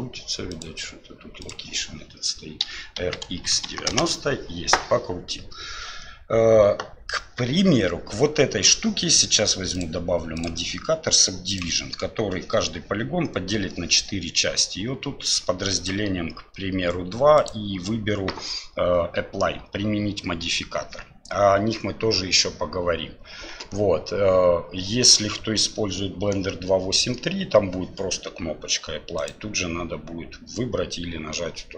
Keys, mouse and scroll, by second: 0.6-1.7 drag, 2.6 r, 9.7 click, 10.4-11.6 drag, 15.8 click, 17.4-24.4 drag, 29.2-31.7 drag.